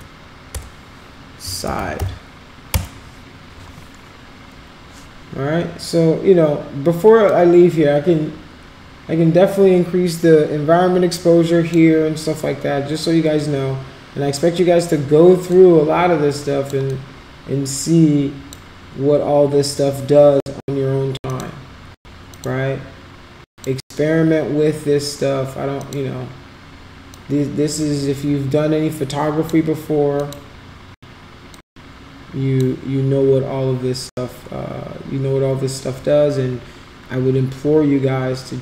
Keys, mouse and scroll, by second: 0.5 BackSpace, 2.7 Return, 7.3-11.7 drag, 15.5-16.7 drag, 17.0-18.5 drag, 22.3 click, 23.6 click, 25.9 click, 27.2-29.4 drag, 30.2 click, 31.6-32.6 drag.